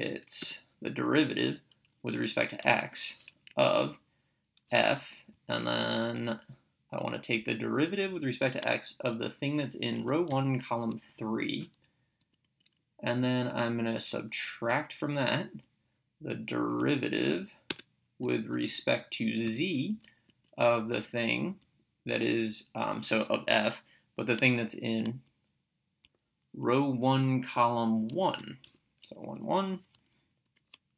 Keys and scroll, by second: 0.5 Return, 2.6 x, 3.5 Right, 4.6 f, 7.5 ctrl+(, 10.0 1, 10.3 ,, 11.1 3, 12.3 Right, 14.7 -, 17.8 Return, 19.5 z, 20.3 Right, 20.9 f, 26.1 (, 27.9-29.2 typing, 29.2 Right.